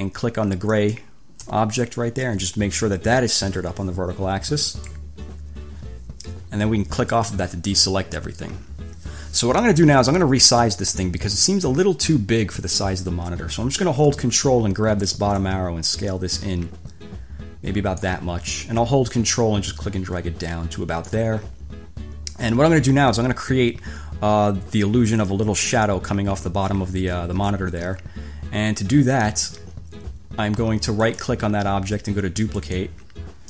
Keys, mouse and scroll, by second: 0.9 shift+click, 4.9 click, 7.2 click, 10.6 click, 15.5-18.4 ctrl+drag, 19.2 ctrl+click, 31.3 click, 32.8 click.